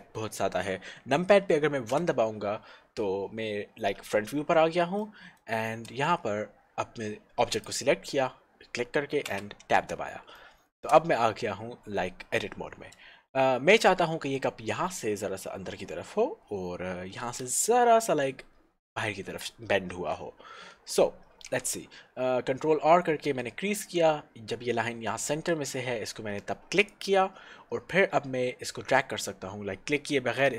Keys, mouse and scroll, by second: 2.1 KP_1, 4.5 scroll up 1, 5.0 shift+middle click, 6.4-7.7 scroll up 1, 7.7 click, 9.3 Tab, 10.4 shift+middle click, 21.6 ctrl+r, 26.9 click.